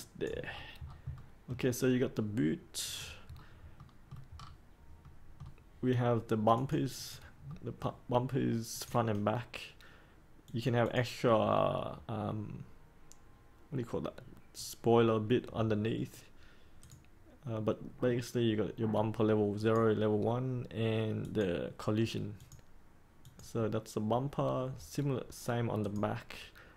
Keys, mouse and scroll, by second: 0.4-0.9 scroll down 1, 1.1 middle click, 2.8 click, 3.3-3.7 scroll down 1, 3.7 middle click, 4.3 scroll down 1, 5.0 middle click, 6.5 click, 7.4 middle click, 8.7 click.